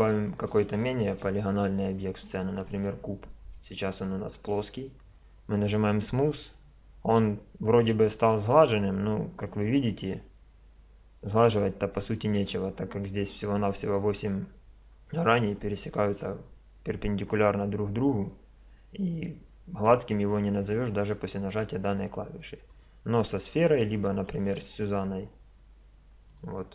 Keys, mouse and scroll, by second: 0.3-2.3 drag, 1.1 shift+a, 3.3-3.9 middle drag, 3.9 drag, 4.1-5.7 middle drag, 5.7-7.7 drag, 8.9-11.3 middle drag, 12.2-22.7 middle drag, 22.7 right click, 24.2 middle click, 24.5-26.1 drag, 24.5 shift+a.